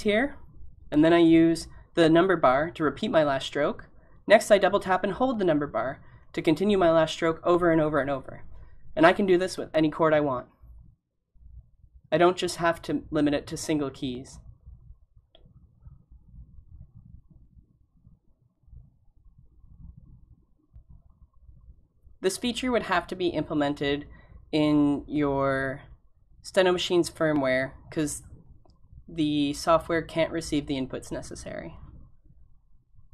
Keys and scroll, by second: 1.6-3.6 typing, 4.6-5.6 typing, 25.8 b, 25.8 b, 26.3 b.